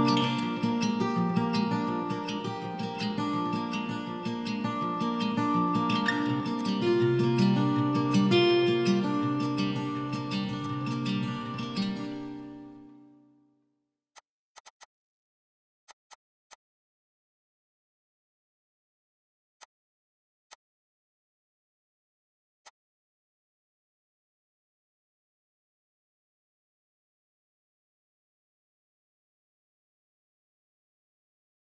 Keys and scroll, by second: 21.1 typing, 22.9-23.9 typing.